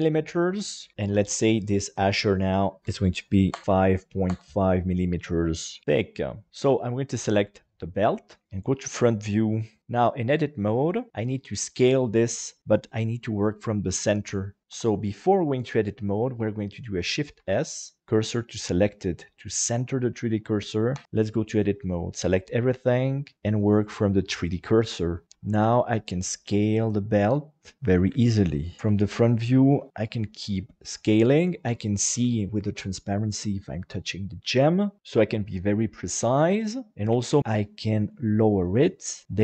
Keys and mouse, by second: 2.3-3.6 drag, 3.6 click, 8.3 click, 8.4 KP_1, 9.8 Tab, 10.2 middle click, 14.7 Tab, 17.3 shift+s, 20.9 Tab, 22.2 a, 23.3-25.1 drag, 25.2 KP_7, 25.2 s, 28.8 s, 31.1 click, 32.3 shift+middle click, 35.0 Escape, 35.2 s, 37.0 g, 37.2 z.